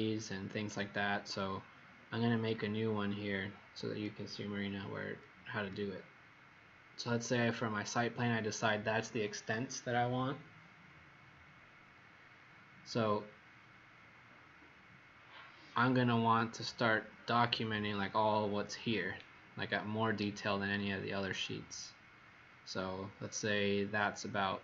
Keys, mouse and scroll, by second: 1.7-2.2 scroll up 3, 2.8-3.8 scroll up 2, 3.8-4.3 scroll up 2, 5.0-5.4 scroll up 1, 11.5 middle click, 12.9 scroll down 1, 13.9 middle click, 19.3 scroll down 1, 20.3-20.7 scroll up 1, 22.8 middle click.